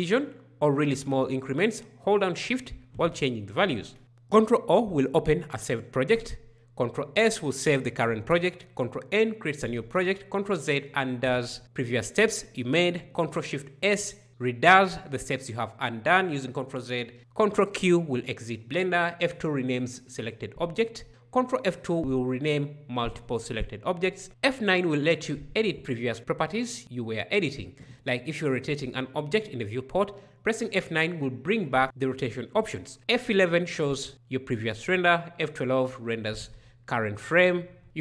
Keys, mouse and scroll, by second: 4.0 ctrl+o, 6.6 ctrl+s, 9.0 ctrl+n, 10.7 ctrl+z, 13.7 ctrl+alt+z, 17.2 ctrl+q, 18.9 F2, 20.9 ctrl+F2, 23.9 F9, 31.7 F11, 35.0 F12, 37.6 ctrl+space.